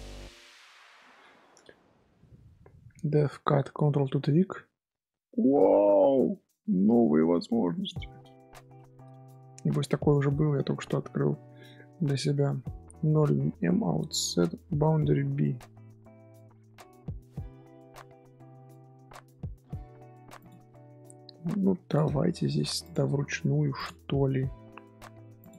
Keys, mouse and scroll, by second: 0.0-0.6 scroll down 1, 21.2 scroll up 2, 21.8 click, 22.1 shift+middle drag, 22.4-23.1 right drag, 23.1 1, 23.7 click.